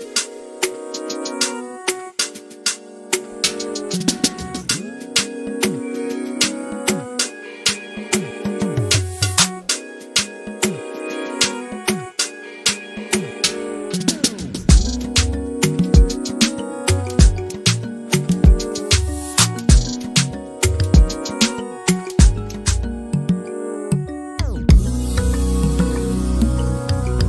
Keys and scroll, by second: 1.0 m, 18.0 r, 20.2 l, 21.9 m.